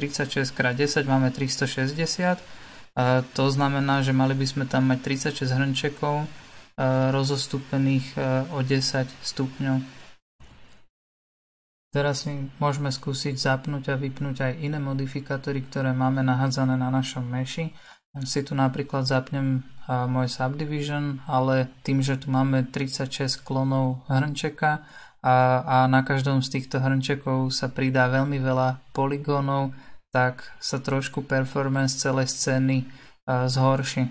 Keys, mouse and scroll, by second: 0.7-1.2 scroll down 2, 1.6-2.8 shift+middle drag, 2.8 scroll down 2, 3.6-4.3 scroll up 1, 4.3-7.2 shift+middle drag, 7.2-8.1 scroll up 3, 8.1-16.6 shift+middle drag, 16.6 click, 18.8 scroll up 3, 19.6-20.2 scroll down 2, 20.2-20.9 shift+middle drag, 20.9-21.3 shift+scroll down 1, 21.3 scroll up 1, 22.4-23.5 shift+middle drag, 23.5-26.5 scroll down 1, 27.1-28.3 drag, 28.3-34.1 middle drag.